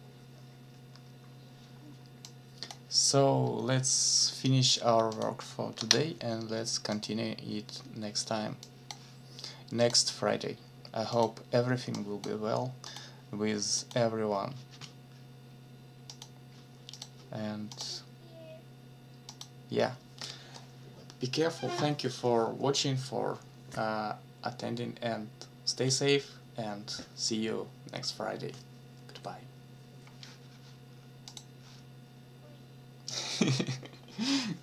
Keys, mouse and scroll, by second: 2.2 click, 5.1 click, 5.8 ctrl+s, 6.9 click, 8.6 click, 9.8 click, 11.1 click, 11.9 click, 13.8 click, 16.1 click, 16.9 click, 17.7 click, 19.3 click, 31.3 click.